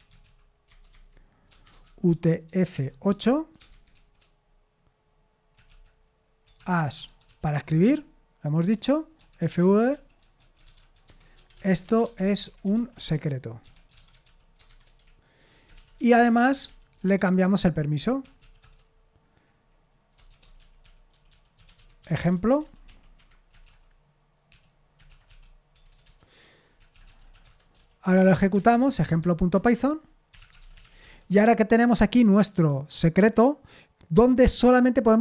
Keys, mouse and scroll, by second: 0.0-4.4 typing, 0.9 Tab, 6.4-7.8 typing, 8.6 Return, 8.9-18.6 typing, 20.1-23.4 typing, 24.5-31.3 typing, 26.0 Return.